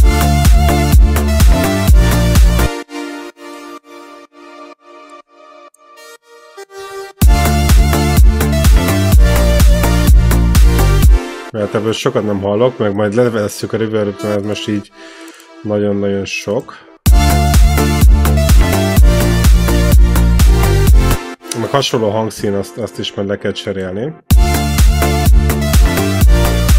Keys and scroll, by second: 2.5 space, 7.0 space, 10.9 space, 11.2 e, 14.0 e, 16.9 space, 20.9 space, 21.2 e, 24.1 space.